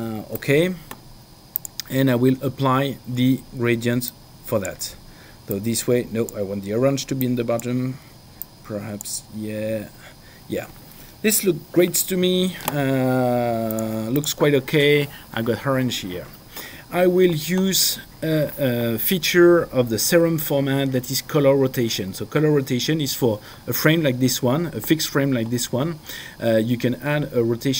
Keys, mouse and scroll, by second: 1.7 click, 4.1 click, 5.5 click, 7.2 click, 8.4 click, 13.7 click.